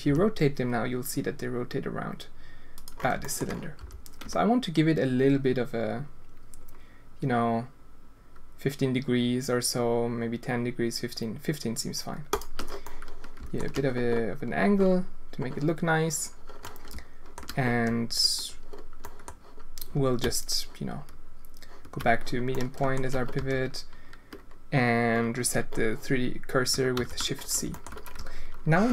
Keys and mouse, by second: 0.0 r, 3.2 shift+click, 3.7 r, 12.8 click, 16.6 alt+shift+click, 17.1 alt+shift+middle click, 19.0 middle click, 22.5 middle click, 22.8 alt+shift+click, 23.3 a, 26.9 shift+c, 27.7 shift+click, 28.1 Tab.